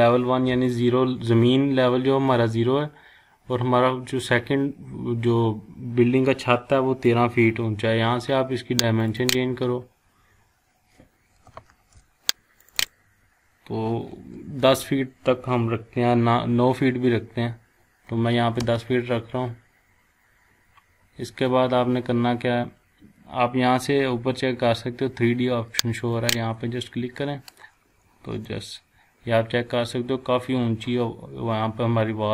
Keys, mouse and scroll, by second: 9.0 click, 11.7 ctrl+z, 12.6 click, 14.3-14.6 typing, 18.6 Return, 26.1 click, 28.5-32.3 shift+middle drag.